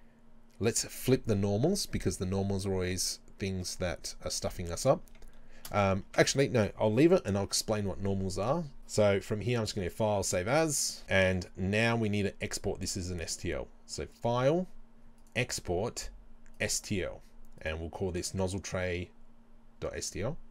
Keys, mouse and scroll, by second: 0.5 a, 6.1 Tab, 9.5-11.0 drag, 11.1-20.5 middle drag.